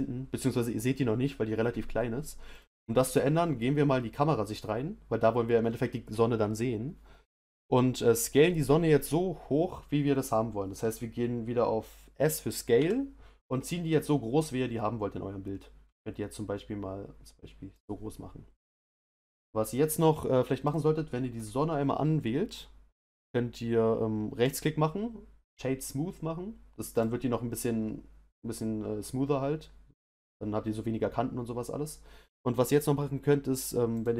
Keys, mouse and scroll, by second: 2.5 click, 12.7 s, 20.7 click, 21.4 click, 26.9 right click, 34.0 click.